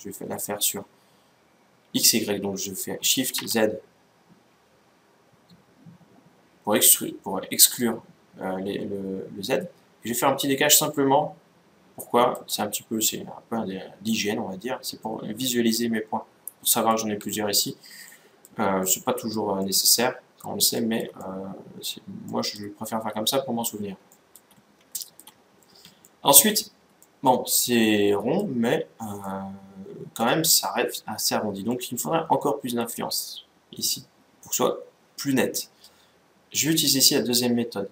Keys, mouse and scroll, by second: 12.8-14.6 middle drag, 17.7-23.7 middle drag, 23.9-28.5 middle drag, 28.9-30.6 middle drag, 30.6-31.4 scroll up 1, 31.4-33.1 middle drag.